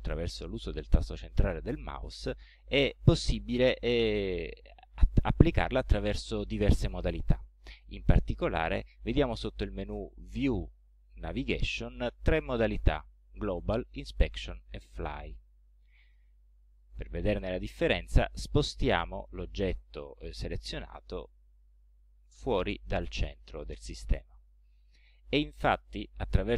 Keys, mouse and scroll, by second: 10.3 click, 16.5 scroll down 2, 17.3 middle click, 17.8-18.4 scroll down 4, 20.8-22.6 drag, 26.5 middle click.